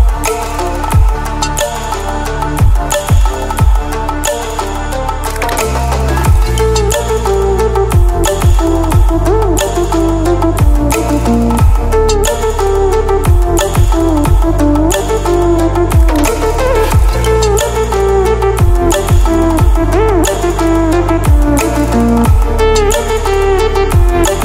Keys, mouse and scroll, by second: 0.2 space, 0.5 click, 0.6-1.0 space, 1.2 click.